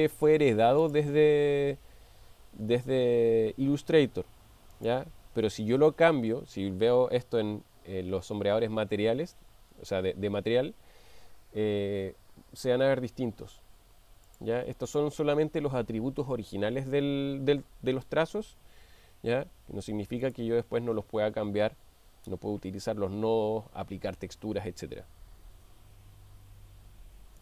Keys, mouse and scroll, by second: 0.8 click, 4.8 click, 14.3-14.7 drag, 20.3 click.